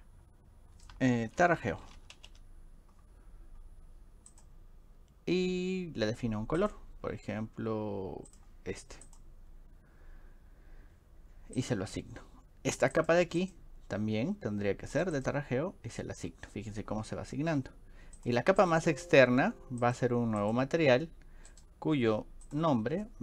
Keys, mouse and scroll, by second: 1.2-2.8 typing, 4.3 click, 6.6 click, 8.3 click, 9.1 click, 11.6 click, 12.9 click, 13.4 click, 15.0 click, 15.2 click, 18.2 click, 18.7 click, 19.8 click, 20.4 click, 21.5 scroll down 2.